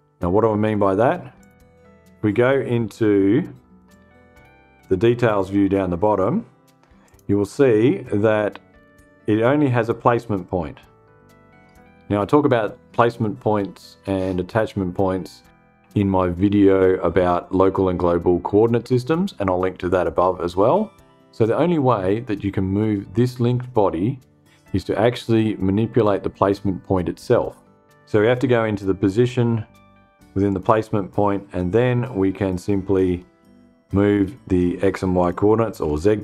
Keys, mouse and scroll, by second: 0.9 click, 3.4 click, 4.8 click, 6.5 click, 28.6 click, 30.0 click, 31.8 scroll down 1, 32.4-32.8 scroll down 1, 33.0 scroll down 1, 33.2 scroll up 1, 34.7 click, 35.3-35.6 scroll up 1, 35.9-36.2 scroll down 7.